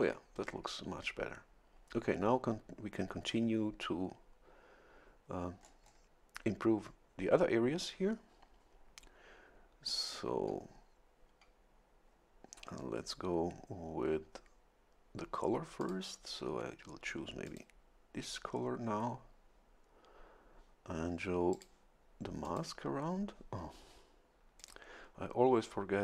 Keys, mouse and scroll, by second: 5.6-6.1 scroll up 1, 15.8 click, 17.5 click, 21.5 click, 22.4 click, 24.6 click.